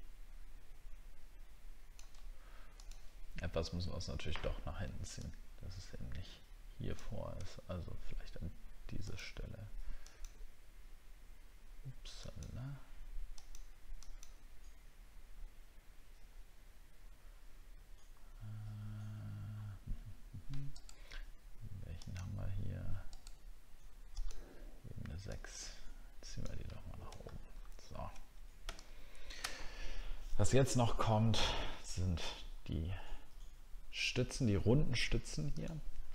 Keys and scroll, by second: 27.2 alt+scroll down 1, 27.8 alt+scroll down 1.